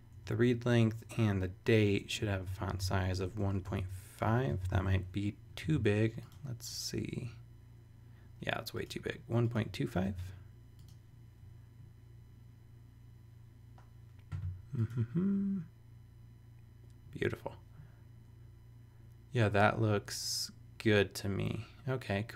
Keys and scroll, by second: 0.1 Return, 2.0-5.2 typing, 5.6 super+s, 9.6 2, 10.0 super+s.